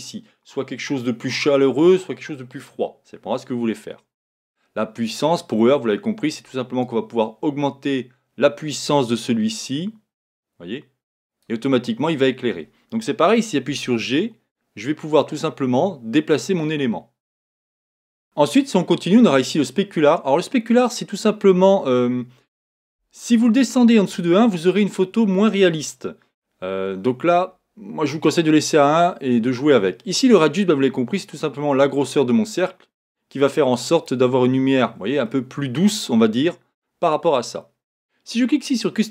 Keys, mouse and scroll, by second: 7.2-10.5 drag, 14.4 g, 30.6-33.2 drag, 34.5-35.0 scroll down 3, 35.3-38.3 middle drag.